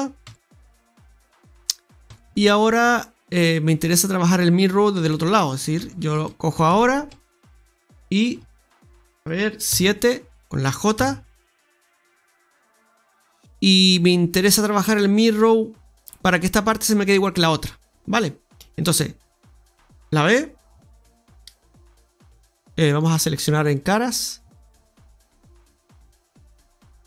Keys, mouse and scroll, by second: 0.2 Tab, 0.7 middle click, 2.0 Tab, 2.4 middle click, 4.4-4.9 scroll up 3, 5.0 shift+middle click, 5.3 scroll up 2, 5.7 Tab, 6.1 shift+middle click, 6.6 Tab, 7.9 right click, 9.6 KP_7, 10.3 shift+right click, 10.3-10.9 scroll up 7, 10.9 j, 11.8 scroll down 1, 12.4-14.1 scroll down 7, 14.1-16.5 scroll down 1, 19.4 click, 20.6 click, 23.6 right click, 24.0 right click, 26.2 right click.